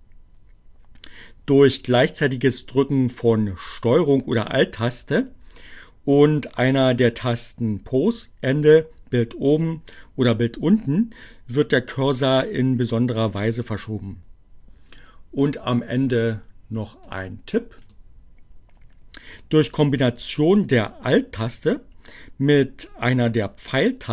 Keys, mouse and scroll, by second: 17.1 click, 17.6 click.